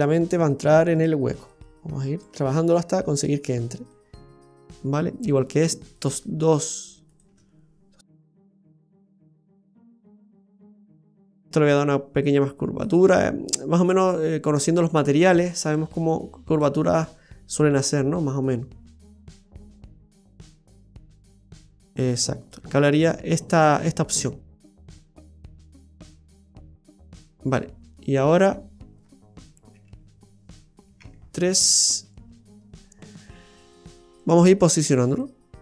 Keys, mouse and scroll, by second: 0.3 click, 1.0 right click, 1.5 click, 3.2 right click, 3.9 click, 5.9 right click, 6.5 shift+right click, 7.2 shift+right click, 8.2 click, 10.9 right click, 12.8 click, 14.6 right click, 15.5 click, 17.6 click, 17.8 click, 18.9 click, 19.4 right click, 20.1 click, 22.4 right click, 22.8 middle click, 24.2 click, 25.7 middle click, 29.7 KP_1, 31.0 KP_3, 32.5-34.2 scroll up 4, 34.2 right click, 34.2 scroll up 1, 35.2 click.